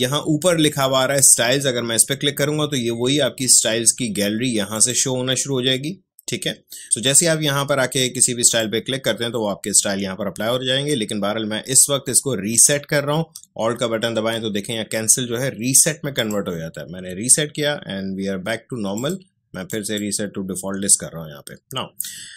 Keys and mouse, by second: 1.2-4.7 drag, 8.4 click.